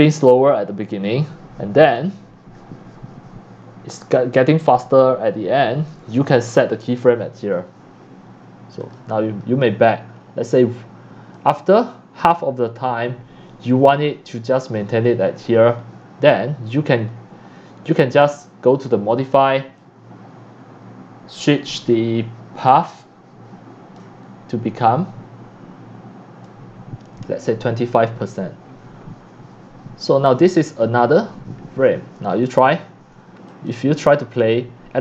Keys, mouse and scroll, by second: 8.8 click, 9.1 click, 11.3-14.7 drag, 15.1 click, 18.7 click, 19.8-24.0 drag, 26.5-30.3 drag, 32.4 click, 33.1-35.0 drag.